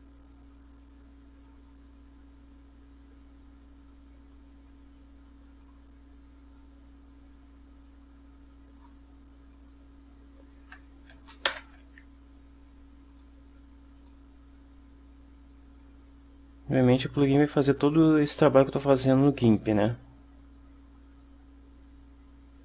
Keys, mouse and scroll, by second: 4.8 click, 6.7-9.1 drag, 9.6 click, 11.6 ctrl+shift+e, 13.2 click, 14.1 click, 19.8 click.